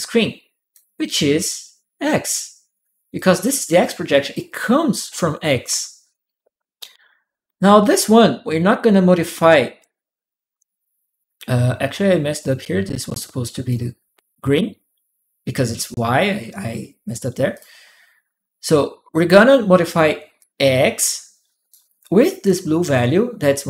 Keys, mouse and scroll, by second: 3.0 click, 3.9 click, 12.2-13.5 ctrl+drag, 15.6 ctrl+click, 17.3 ctrl+click, 20.2-21.5 ctrl+drag, 22.7 click.